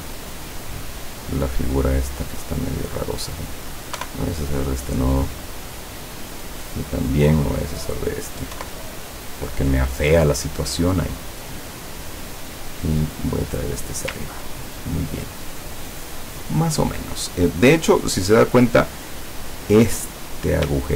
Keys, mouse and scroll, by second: 1.2 click, 2.9 click, 4.1 Delete, 5.0-6.8 drag, 7.0 click, 7.6 click, 8.6 Delete, 11.5 click, 12.4-13.9 drag, 14.5-14.9 ctrl+scroll down 2, 17.8 click, 19.9 click.